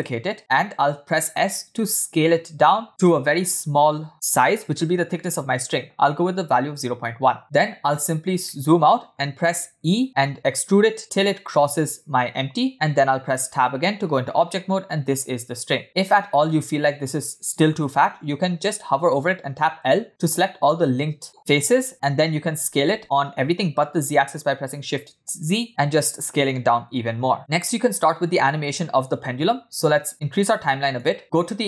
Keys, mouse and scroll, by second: 1.8 s, 8.4-8.9 scroll down 3, 8.9 middle click, 10.2 e, 13.2 Tab, 14.2 scroll up 3, 14.9-15.8 scroll up 2, 15.8 scroll down 2, 15.8 Tab, 19.1 l, 22.5 s, 27.4 middle click, 27.4-27.8 scroll up 4, 27.8-28.2 scroll down 1, 29.3-30.1 scroll down 1, 30.8 click.